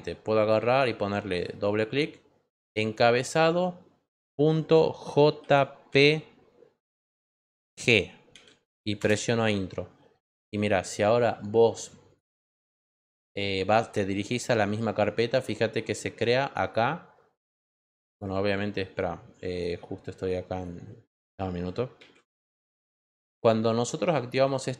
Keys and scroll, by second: 4.5 ., 5.3 j, 5.9 p, 8.3 g, 21.9 super+d.